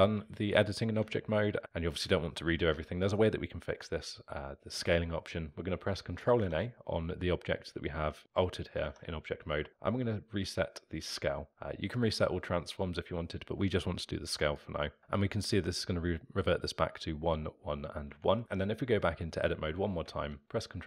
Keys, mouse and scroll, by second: 0.1 ctrl+z, 1.0 Tab, 18.2 Tab, 20.0 ctrl+b.